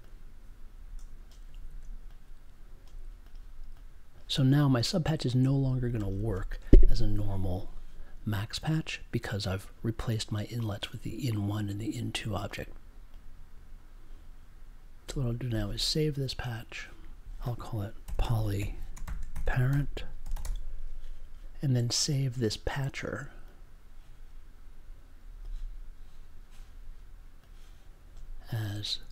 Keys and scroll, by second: 1.5 super+a, 18.0 p, 19.0 shift+-, 19.3 p.